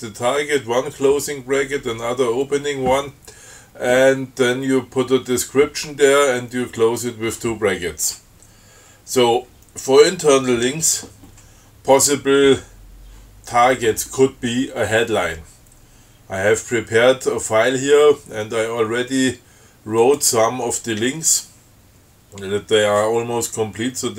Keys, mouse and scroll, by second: 20.2 click.